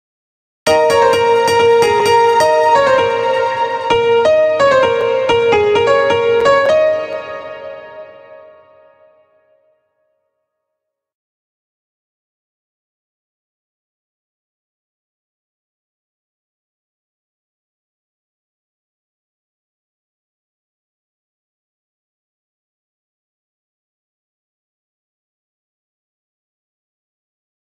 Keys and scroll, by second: 0.1 space, 6.5 space, 26.5 space.